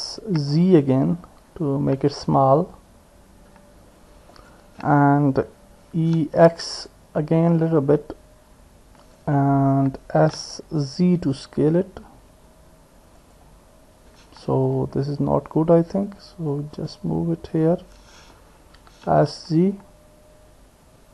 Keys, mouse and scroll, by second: 2.7-14.8 drag, 6.0 e, 10.2 s, 14.8 ctrl+z, 16.6-17.7 drag, 18.8 s.